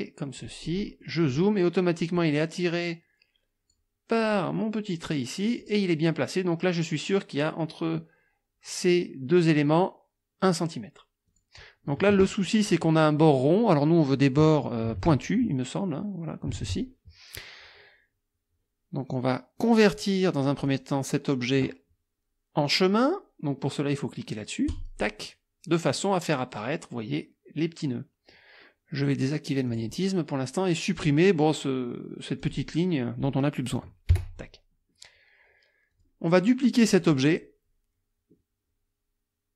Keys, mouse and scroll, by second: 0.7 middle click, 2.2-3.9 drag, 4.2 click, 5.6 click, 11.3 click, 15.1 alt+Tab, 16.6 alt+Tab, 20.7 click, 24.7 click, 29.7 click, 31.0 click, 32.4 click, 34.1 Delete, 35.9 click, 37.0 click.